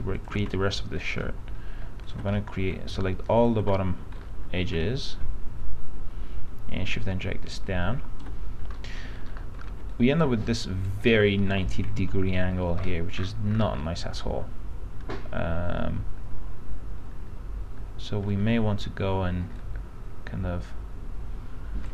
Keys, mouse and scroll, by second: 0.4 ctrl+click, 0.9 alt+middle click, 2.5 alt+middle click, 3.5 ctrl+click, 3.9-5.1 alt+middle drag, 7.1 shift+click, 8.9 middle click, 9.1-9.5 scroll up 1, 9.5 middle click, 9.8 middle click, 10.1 click, 11.7 p, 12.3 z, 12.5 scroll down 1, 14.5-19.2 alt+middle drag, 19.7-21.9 drag.